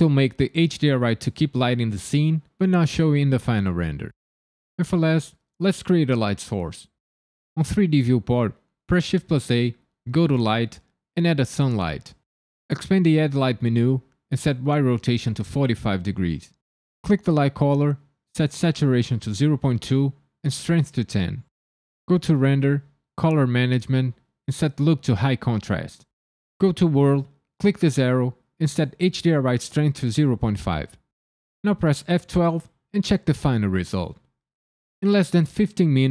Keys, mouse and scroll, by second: 8.9 shift+a, 13.1 click, 14.2 click, 17.5 click, 20.5 click, 22.4 click, 23.1-24.4 scroll down 6, 24.4 click, 26.9 click, 27.9 click, 29.3 click.